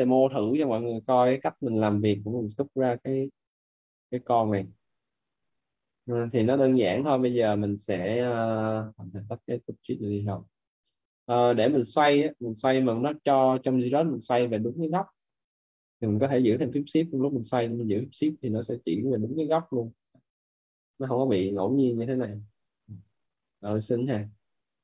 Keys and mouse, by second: 1.9 click, 7.3 right click, 8.6 click, 9.6 right click, 10.9 right click, 13.9 right click, 16.8 right click, 19.6 shift+right click, 21.0 right click, 23.7 shift+f, 24.0 right click.